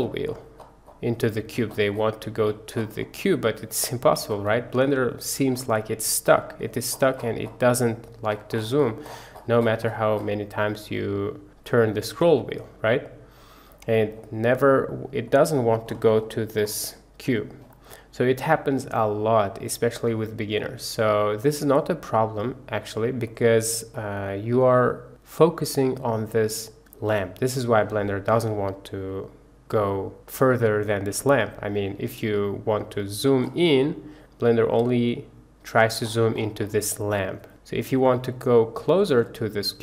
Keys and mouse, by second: 14.5-14.9 middle drag, 15.2-15.6 middle drag, 21.4-22.3 drag, 22.8-23.3 drag, 23.9 click.